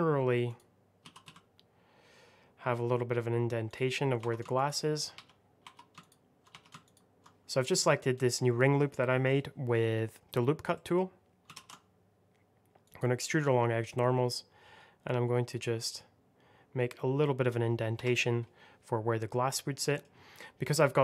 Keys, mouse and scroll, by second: 0.0-0.4 scroll up 1, 0.4 click, 0.9 s, 1.1 x, 3.6 click, 4.1 2, 4.4 alt+click, 5.0 3, 5.5 2, 5.9 alt+click, 6.4 3, 6.7 alt+click, 8.1 middle click, 10.6 middle click, 10.8 middle click, 11.4 alt+e, 12.7 click, 16.1 x, 17.9 Escape, 19.0-19.7 scroll down 1, 19.7 middle click, 20.0 scroll down 1, 20.3 middle click.